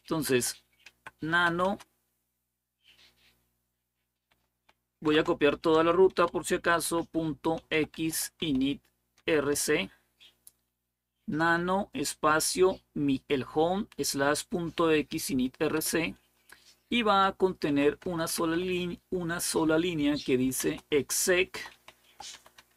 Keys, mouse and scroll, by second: 0.1-1.7 typing, 4.8 typing, 5.9-9.3 typing, 17.2-18.8 typing, 20.4-22.7 typing.